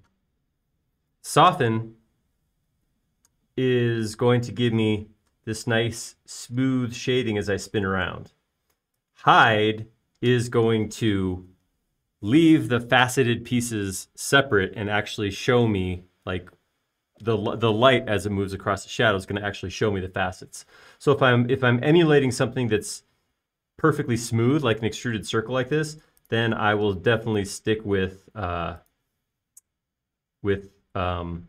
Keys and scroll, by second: 28.4 m.